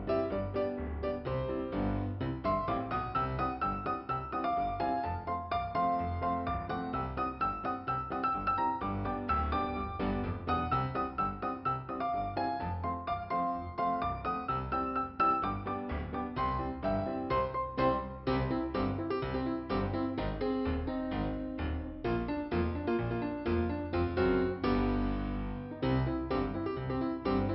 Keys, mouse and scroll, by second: 0.7 middle click, 1.8 scroll up 2, 2.6 click, 2.8 double click, 3.3 double click, 3.9 double click, 4.8 scroll down 1, 9.3 scroll down 1, 12.1 scroll up 2, 14.8 click, 16.9 click, 17.7 click, 21.7 click, 23.6 click, 25.7 click, 25.8 click, 25.9 click.